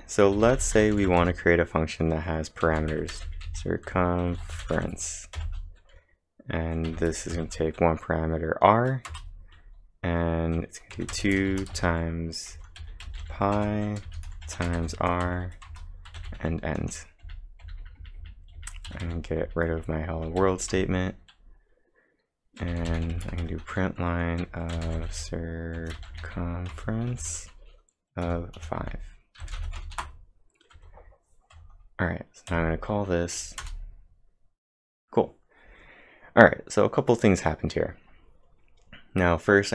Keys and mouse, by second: 0.6-1.4 typing, 4.0-5.4 typing, 6.9 r, 7.6 shift+0, 9.1 Return, 10.9-14.8 typing, 15.3 Return, 15.7 Return, 16.1-20.9 typing, 23.4 shift+9, 24.8 c, 26.0-27.2 typing, 28.3 5, 29.3-30.1 typing, 33.6 Return.